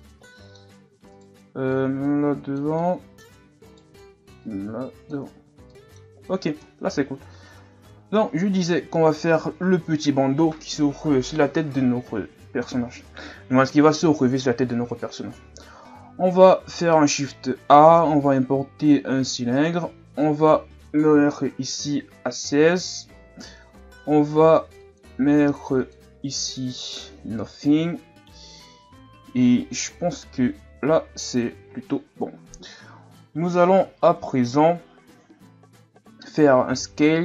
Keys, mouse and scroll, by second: 0.0-1.1 middle drag, 1.1 right click, 1.7-2.8 drag, 2.8 middle click, 3.7 right click, 4.4 click, 5.3 Tab, 5.4 scroll down 1, 5.7-6.6 middle drag, 6.6 KP_1, 7.6 ctrl+s, 8.1 a, 8.6-9.9 scroll down 3, 15.7 shift+a, 20.4-23.4 drag, 24.8-25.9 drag, 26.7-29.8 drag, 32.3 Tab, 36.6 s.